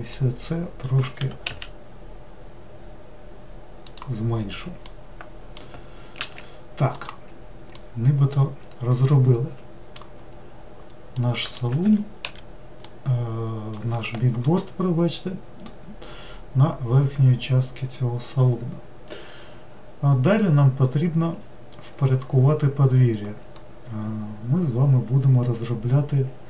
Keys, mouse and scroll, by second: 1.2 g, 4.8-6.1 middle drag, 6.1 alt+z, 6.9 click, 7.8-10.6 middle drag, 10.6-11.2 scroll down 1, 11.2 scroll down 1, 11.2-11.8 middle drag, 11.8 4, 12.9-16.0 middle drag.